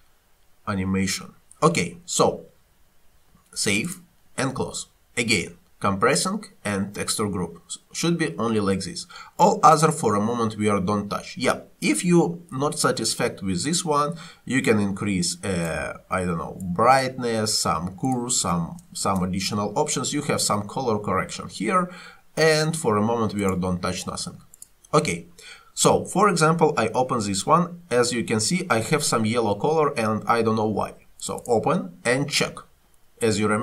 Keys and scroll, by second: 19.0 1, 19.1 Return.